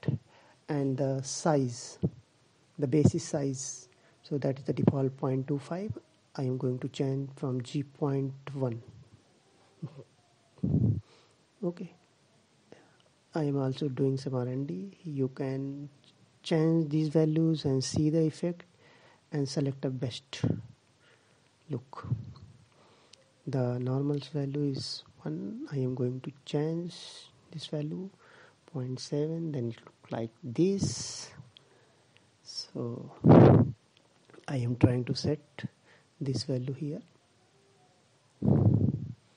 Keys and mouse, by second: 7.5-8.8 drag, 15.0-16.4 drag, 21.7-23.2 drag, 34.1 click, 38.8-39.3 drag.